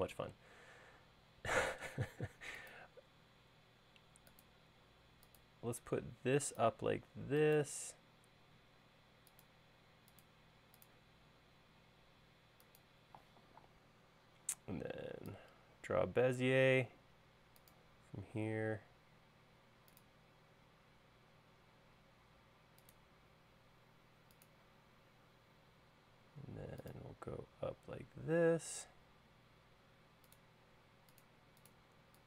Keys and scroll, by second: 26.0 l, 30.7 |, 31.9 e.